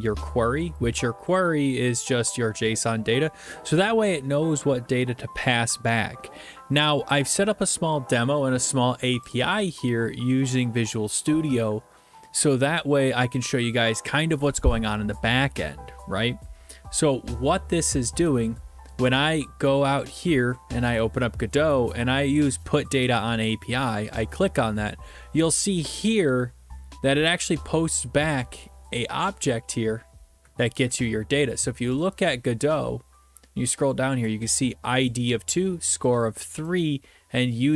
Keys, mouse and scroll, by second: 1.3 click, 9.3 click, 18.3 click, 20.0 click, 24.2 click, 28.4 click, 32.0 click, 32.8-34.2 scroll, 35.1 click, 36.1 click.